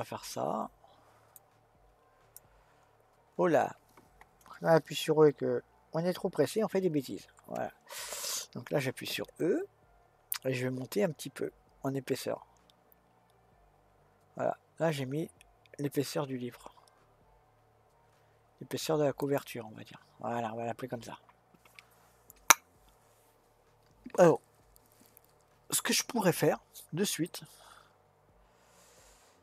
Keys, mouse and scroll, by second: 2.5 click, 7.1 ctrl+z, 9.2 e, 27.2-29.4 middle drag.